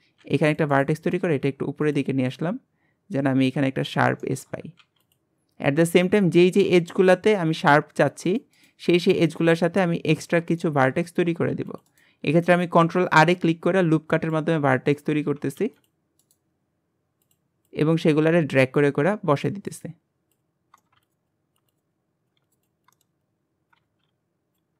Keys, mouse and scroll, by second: 0.2 ctrl+r, 0.8-1.9 right drag, 2.3 click, 4.2 shift+middle click, 4.8 ctrl+r, 6.0 click, 7.6-8.1 scroll up 1, 8.1 ctrl+r, 8.6 right click, 9.2 click, 10.6 shift+middle click, 11.1-11.5 scroll up 1, 11.5 ctrl+r, 11.9-13.1 right drag, 13.1 click, 14.5 scroll down 3, 14.7 shift+middle click, 15.2-15.6 scroll up 1, 15.6 ctrl+r, 16.2-17.7 right drag, 17.7 click, 19.1 ctrl+r, 19.7 right click, 20.5 click, 20.8 shift+middle click, 20.9 scroll up 1, 21.0 ctrl+r, 21.1 right click, 21.3 click, 21.7 ctrl+r, 21.8 right click, 21.9 click, 22.4 ctrl+r, 22.5 right click, 22.6 click, 22.9 shift+middle click, 23.2 click, 23.8 ctrl+r, 24.6 scroll down 1.